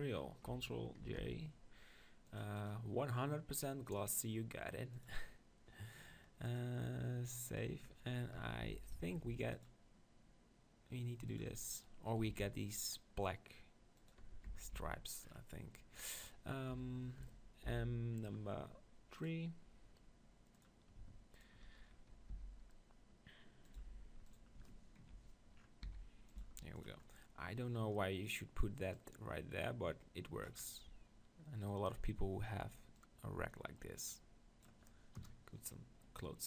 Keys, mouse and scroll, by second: 1.0 ctrl+j, 2.7-5.8 drag, 6.6-8.0 drag, 8.0-9.5 middle drag, 8.7 Tab, 9.1 ctrl+r, 9.5-10.9 drag, 11.4-13.2 drag, 11.8-13.7 right drag, 12.3 ctrl+r, 14.3 Tab, 14.5 Tab, 14.8 Tab, 16.7 KP_1, 17.8 m, 20.6-23.3 drag, 22.3 s, 23.8-25.1 drag, 23.8 g, 25.2 click, 25.7-26.8 middle drag, 25.8 s, 26.4 g, 26.8 click, 30.6 click, 30.7-33.0 middle drag, 33.0-35.1 drag, 35.1 KP_0.